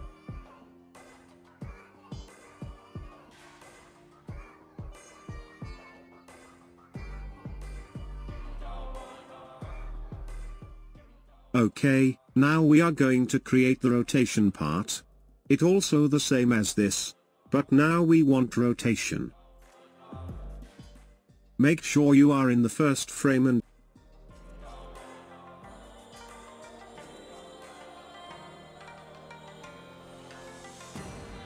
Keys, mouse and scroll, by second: 0.2 space, 12.5 space, 18.4 scroll up 2, 20.2-23.0 shift+middle drag, 23.0-25.0 drag, 25.4-30.1 drag, 30.1-31.4 shift+middle drag.